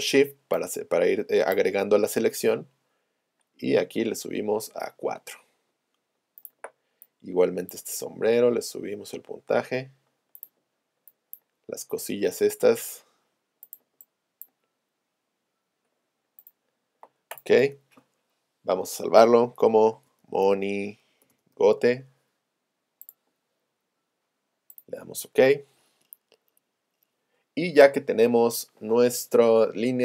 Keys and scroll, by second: 21.1-21.9 typing.